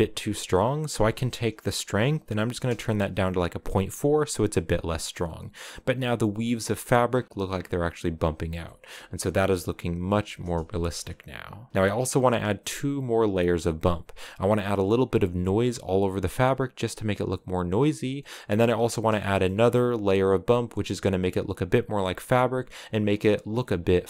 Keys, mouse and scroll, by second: 2.4-3.8 drag, 3.8 scroll up 4, 6.8-7.4 scroll down 17, 8.4 shift+middle click, 8.6-9.2 scroll down 1, 10.5 shift+middle click, 10.8 scroll up 1, 11.7 scroll down 3, 18.2 scroll up 5, 19.0 shift+middle click, 19.2-19.7 scroll up 3.